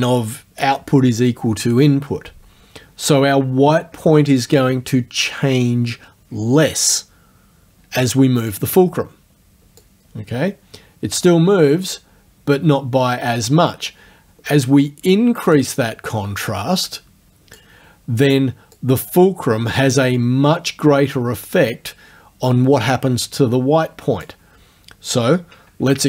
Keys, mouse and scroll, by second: 9.8-14.1 drag, 14.5-15.7 drag, 16.5-17.8 drag, 18.8-24.4 drag, 24.4-26.0 scroll up 1.